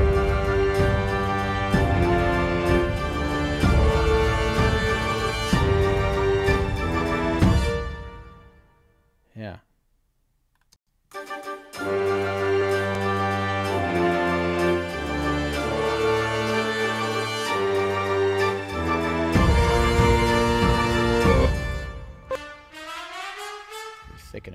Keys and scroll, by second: 7.2 space, 10.7 space, 21.2 space.